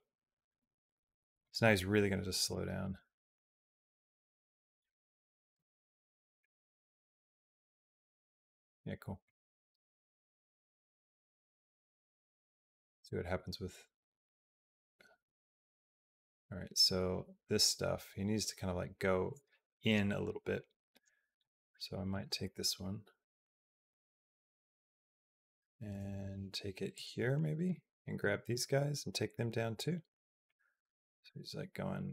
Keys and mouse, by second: 2.4-5.4 drag, 5.4 space, 8.4 space, 9.1-21.3 drag, 21.9 click, 22.2 g, 27.4 click, 28.1 g, 30.3-32.1 drag.